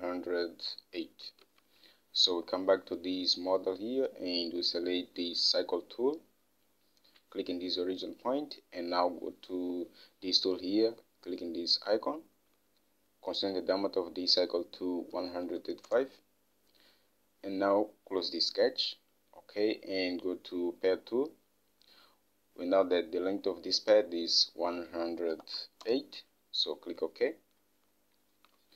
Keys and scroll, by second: 1.9 alt+Tab, 15.4-16.7 typing, 25.5-26.7 typing.